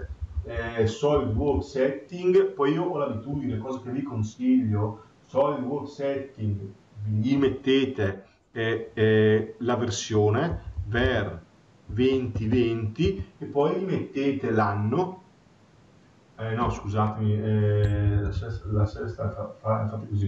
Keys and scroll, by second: 17.8 BackSpace.